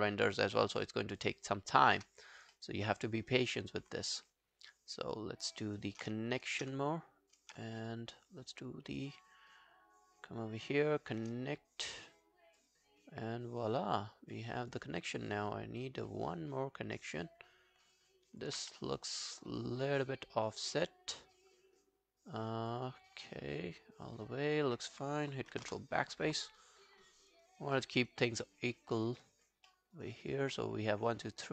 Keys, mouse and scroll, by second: 2.5 alt+middle click, 2.9 alt+click, 3.3 alt+right click, 3.6 alt+middle click, 4.5 scroll down 1, 4.7 alt+click, 5.7 alt+right click, 6.5 shift+click, 6.8 alt+click, 7.8 shift+right click, 12.1-12.6 alt+scroll down 1, 12.6 alt+click, 15.3 alt+click, 18.6 alt+click, 18.6 q, 18.8 right click, 20.0 double click, 20.5 alt+scroll down 1, 20.8 alt+click, 22.9 alt+scroll down 2, 23.3 alt+click, 25.6 ctrl+BackSpace, 26.9 alt+click, 27.5 alt+right click, 27.8 alt+middle click, 28.0 alt+right click, 28.2 alt+click, 28.7 alt+middle click, 28.9 alt+right click, 29.2 alt+click, 29.7 alt+middle click, 30.0 alt+right click, 30.2 alt+click.